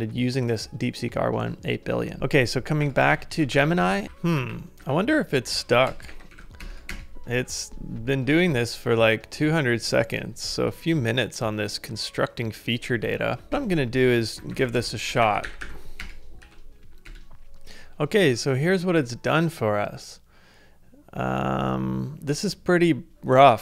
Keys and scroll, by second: 2.2 super+Tab, 2.8 ctrl+a, 3.1 k, 3.6 ctrl+a, 3.7 z, 4.4 ctrl+a, 4.8-7.4 typing, 13.5-16.5 typing, 17.1 Return.